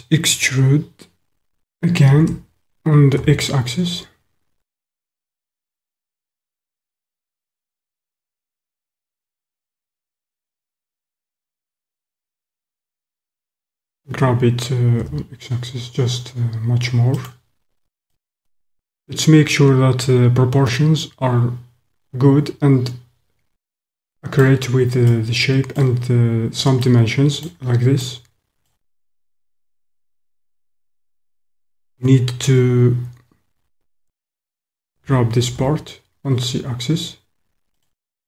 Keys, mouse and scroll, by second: 2.2 e, 3.2 x, 6.9 click, 7.8 middle click, 7.8 typing, 8.6 middle click, 8.7 click, 8.8-10.7 middle drag, 10.7 click, 12.4 click, 13.9 g, 15.0 x, 17.3 click, 18.3 middle click, 18.9-23.6 middle drag, 23.6 click, 25.1 middle click, 26.8 middle click, 28.1 middle click, 34.9 g, 35.6 z, 37.9 click.